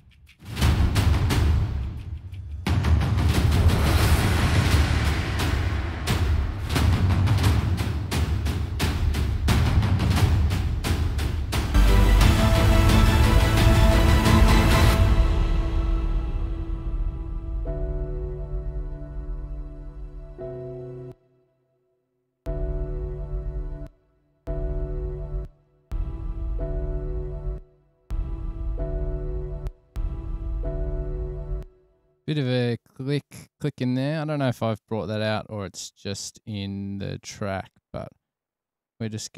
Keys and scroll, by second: 20.0 super+=, 23.3 super+], 23.5 super+], 23.6 super+], 24.2 space, 24.8 space, 25.3 super+], 25.8 space, 27.9 space, 28.3 space, 30.0 space, 30.2 space.